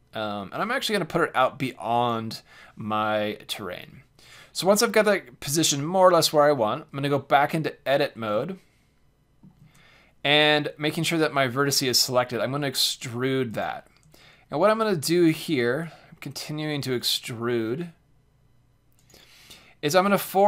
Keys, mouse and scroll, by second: 2.0-4.0 drag, 6.4 Tab, 8.5-9.8 middle drag, 12.2 e, 13.6-15.3 drag, 14.0 e, 15.8 e, 17.5 e, 19.4 e.